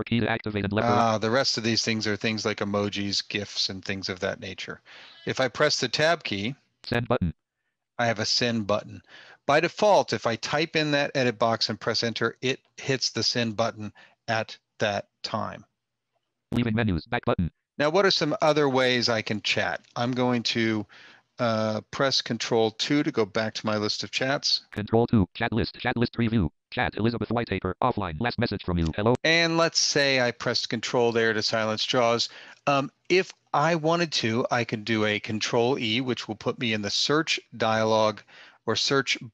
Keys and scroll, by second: 21.6 ctrl+2, 34.6 ctrl+e.